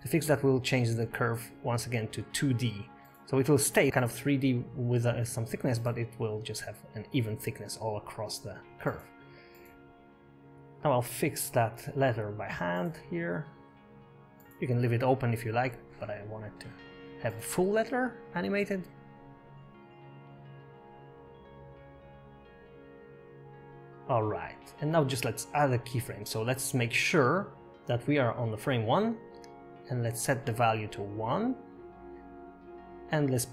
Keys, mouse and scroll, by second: 1.2 click, 2.5 middle click, 3.2 scroll down 5, 3.6 shift+middle click, 3.9 scroll up 1, 4.8 click, 4.8 scroll down 1, 4.9 click, 6.7-7.7 scroll down 10, 6.9 shift+middle click, 6.9 KP_7, 8.4 click, 9.9 click, 12.2 Tab, 12.7 click, 13.9 e, 16.4 scroll up 3, 16.8 shift+middle click, 17.0 scroll up 2, 18.1 click, 20.7 g, 21.9 scroll down 6, 22.3 scroll up 2, 22.5 shift+middle click, 24.5 space, 25.3 click, 28.1 click, 31.5 click.